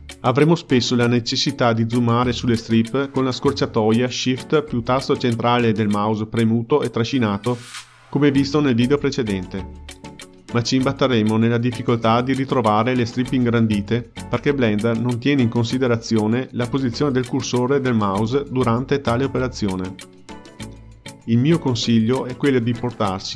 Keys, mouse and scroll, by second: 6.3-11.8 ctrl+middle drag, 11.8 scroll up 1, 12.1-22.9 middle drag.